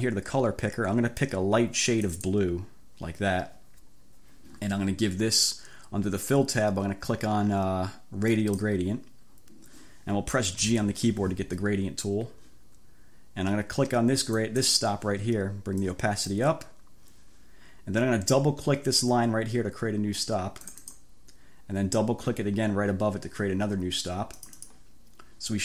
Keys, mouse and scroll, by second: 2.1 click, 8.3 click, 10.7 g, 14.4 click, 15.9 click, 20.7 click, 24.4 click.